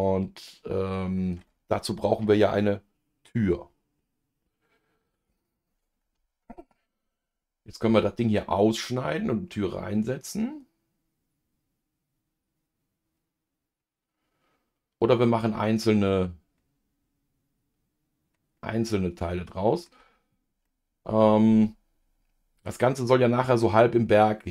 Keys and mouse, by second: 6.9-22.9 middle drag.